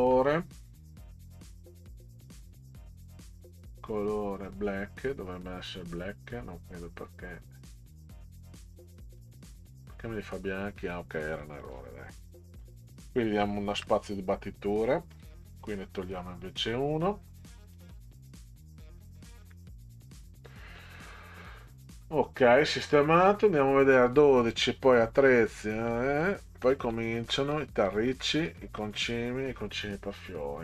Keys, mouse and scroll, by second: 3.3 click, 4.4 click, 7.9 click, 9.2 click, 11.2 click, 11.5 click, 12.6 click, 13.7 Return, 15.1 click, 17.7 click, 19.4 Delete, 22.0 scroll down 2, 23.0 click, 24.4-25.1 scroll down 6, 25.9 middle click, 26.7 middle click, 27.5 middle click, 28.4 middle click.